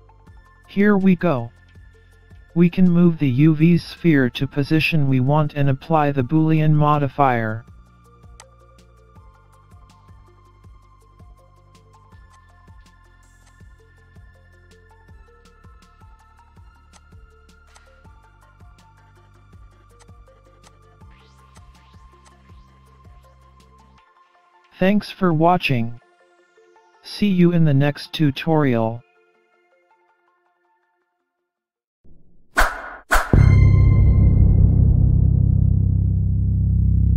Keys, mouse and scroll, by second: 0.7-1.1 scroll up 2, 1.1 middle click, 3.6 middle click, 5.1-5.5 scroll down 4, 5.5-7.2 scroll up 3, 5.9 middle click, 8.4 click, 10.3 scroll up 2, 10.4 middle click, 12.0 scroll down 3, 12.3 click, 13.4 click, 14.2 scroll down 4, 14.4-14.8 scroll up 2, 15.5 alt+g, 15.8-16.3 scroll down 3, 15.9-16.5 scroll up 4, 16.9 click, 20.0 click, 21.5 click, 22.2 click, 23.3-23.7 scroll down 4, 23.5-24.4 scroll up 3, 23.7 middle click, 25.1 scroll up 1, 25.5 middle click, 26.1 scroll down 3, 26.3-26.7 scroll up 1, 26.7-27.2 scroll down 1, 27.2 scroll down 1, 27.3 shift+middle click, 29.1-29.6 scroll up 1, 29.6 middle click.